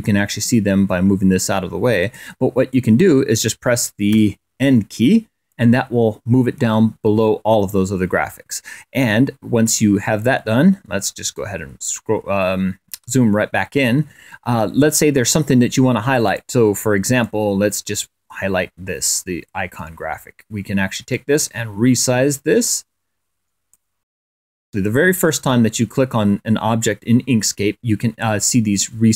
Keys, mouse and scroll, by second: 2.0 click, 2.5 click, 3.9 1, 10.6-11.1 ctrl+scroll up 2, 11.1 ctrl+scroll up 1, 12.8 click, 16.0 click, 17.0-19.2 drag, 20.9-23.8 drag, 24.1 click.